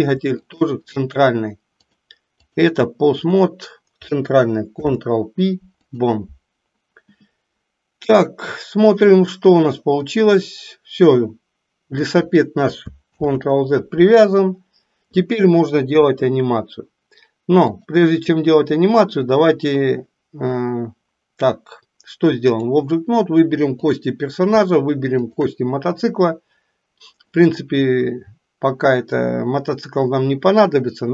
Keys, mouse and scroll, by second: 0.5 shift+click, 1.8 click, 4.7 ctrl+p, 8.8 click, 10.1-12.2 drag, 13.2 ctrl+z, 17.7-22.8 drag, 23.8 click.